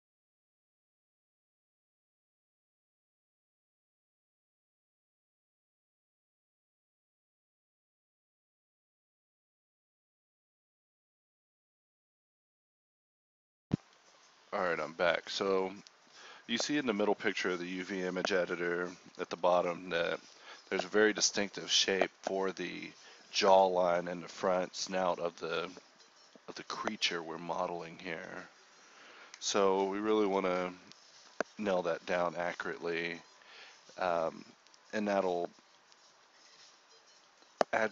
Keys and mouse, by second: 0.7 click, 2.0-4.5 typing, 2.5 middle click, 3.4 middle click, 6.2 click, 6.4 a, 6.7 k, 8.7 click, 9.2 alt+s, 9.7 KP_7, 10.1 z, 12.0 z, 12.5 KP_1, 13.2 g, 13.5-15.6 drag, 15.8 Tab, 15.9 KP_1, 16.0 click, 16.1 Tab, 17.0 g, 17.5 click, 17.5 g, 17.8 click, 18.3 click, 18.8 ctrl+r, 19.5 click, 19.8 alt+s, 20.7-23.6 middle drag, 21.3 f, 21.5 f, 22.0 g, 22.5 g, 23.6-25.1 drag, 25.4 g, 25.7 click, 26.5 g, 27.2 click, 27.3 g, 27.7 click, 28.1 a, 28.5 k, 29.7 k, 31.5 a, 32.2 l, 32.6 a, 32.7 k, 33.9 k, 35.0 a, 35.6 k, 36.7 right click, 36.8 g, 37.6 g.